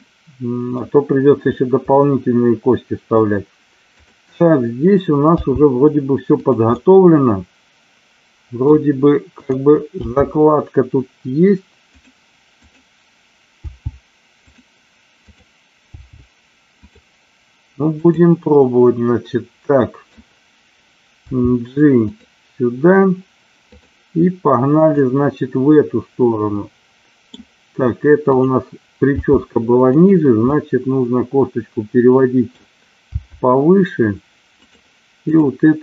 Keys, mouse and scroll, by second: 0.0 middle click, 1.8-3.1 middle drag, 3.9 click, 5.4 g, 6.3 click, 6.7-7.9 scroll up 1, 7.9 middle click, 9.9 g, 11.8 click, 12.6 click, 13.6 g, 14.3 click, 15.2 click, 16.1 g, 18.0 click, 18.6-20.1 middle drag, 21.2 g, 23.7 click, 24.8-27.2 middle drag, 28.2 click, 29.1 g, 30.4-32.5 middle drag, 32.5-33.1 scroll down 1, 33.1 g, 35.3 click.